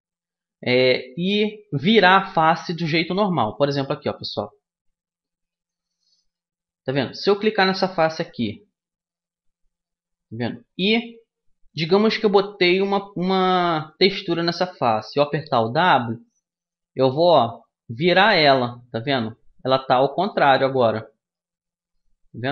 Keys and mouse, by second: 2.9-5.1 middle drag, 6.0-7.6 right drag, 7.6 middle click, 8.8-10.6 right drag, 17.3 w, 18.1 middle click, 20.2 middle click, 21.0 middle click, 22.1 middle click.